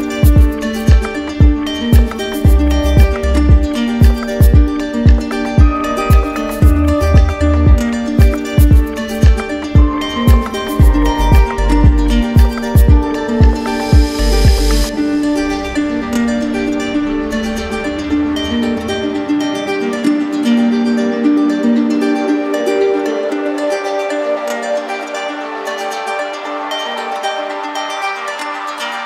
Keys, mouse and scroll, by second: 2.5 click, 2.9 shift+click, 4.4 alt+click, 5.5 click, 5.6 alt+click, 5.8 click, 5.9 alt+click, 6.1 click, 6.2 alt+click, 6.3 alt+click, 6.5 click, 6.6 alt+click, 6.8 click, 6.8 click, 7.3 click, 7.3 click, 7.4 click, 7.5 alt+click, 7.7 click, 7.8 click, 7.9 click, 8.0 alt+click, 8.1 alt+click, 8.2 alt+click, 8.4 alt+click, 9.9 click, 9.9 shift+click, 10.1 click, 10.1 alt+click, 10.8 click, 10.9 alt+click, 11.0 alt+click, 11.1 click, 11.2 alt+click, 11.3 d, 11.4 d, 11.7 click, 11.8 alt+click, 11.8 right click, 11.9 click, 12.1 click, 12.3 click, 12.3 d, 12.3 click, 12.4 right click, 12.5 click, 12.6 z, 12.8 click, 12.8 click, 13.0 alt+click, 13.2 alt+click, 13.3 alt+click, 13.4 alt+click, 13.6 alt+click, 13.7 click, 13.8 shift+click, 15.4 shift+click, 15.5 click, 15.6 click, 15.8 d, 15.9 d, 16.0 click, 16.1 click, 16.2 click, 16.3 shift+click, 16.4 alt+click, 16.6 click, 16.6 shift+click, 16.8 alt+click, 16.9 alt+click, 17.0 alt+click, 17.2 click, 17.3 alt+click, 17.5 click, 17.7 shift+click, 18.0 click, 18.1 ctrl+z, 18.6 ctrl+z, 18.9 click, 19.2 alt+click, 19.5 alt+click, 19.6 alt+click, 19.7 ctrl+z, 19.8 alt+click, 20.0 alt+click, 20.1 click, 20.1 shift+click, 20.3 d, 20.4 d, 20.5 d, 20.5 click, 20.7 click, 20.8 alt+click, 21.0 click, 21.1 right click, 21.3 alt+click, 21.3 ctrl+z, 21.3 click, 21.5 right click, 21.6 alt+click, 21.9 alt+click, 22.1 alt+click, 22.2 right click, 22.3 right click, 22.4 click, 22.4 shift+click, 22.5 alt+click, 22.6 alt+click, 22.8 alt+click, 22.9 alt+click, 23.0 alt+click, 23.1 click, 23.2 alt+click, 23.4 alt+click, 23.7 alt+click, 23.8 click, 24.0 alt+click, 24.1 click, 24.3 alt+click, 24.3 right click, 24.4 right click, 24.6 right click, 24.8 click, 24.8 alt+click, 25.0 click, 25.1 click, 25.1 shift+click, 25.2 alt+click, 25.2 alt+click, 25.3 click, 26.5 click, 27.3 click.